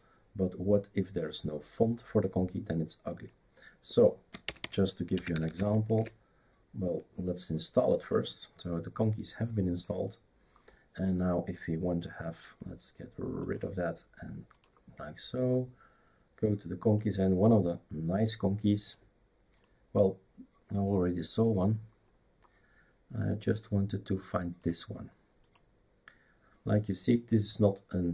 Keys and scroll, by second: 4.4-5.9 typing.